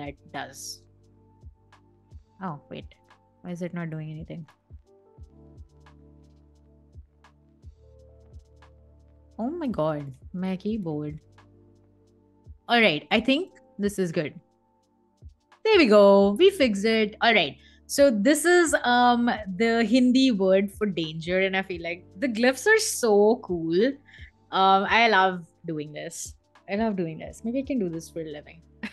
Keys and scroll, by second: 0.5 BackSpace, 1.0 0, 1.2 Return, 7.8 0, 8.0 Return.